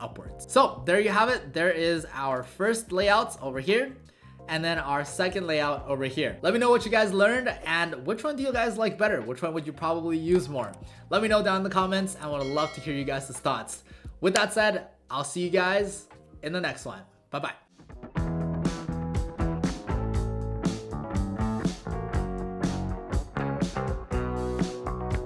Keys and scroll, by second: 2.3 alt+w.